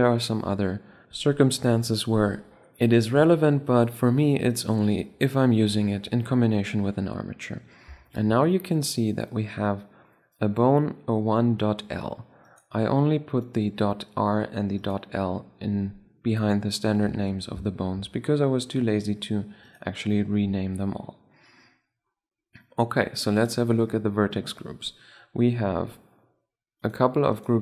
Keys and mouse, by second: 7.8-9.7 middle drag, 12.2-13.9 right drag, 14.5-16.2 right drag, 16.8 Tab, 17.5-19.3 drag, 19.4 right click, 20.1 drag, 20.2 right drag, 20.3-20.9 drag, 20.9 right click, 23.1-24.8 drag, 24.7-26.5 middle drag, 26.5-27.0 drag, 27.0-27.6 middle drag.